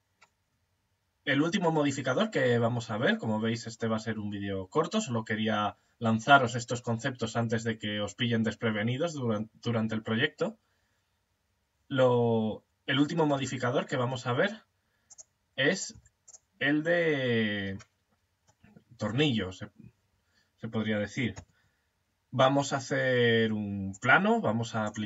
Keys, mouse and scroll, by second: 12.8 x, 15.2 right click, 15.3 x, 17.7-20.8 middle drag, 20.8 shift+a, 24.2 click.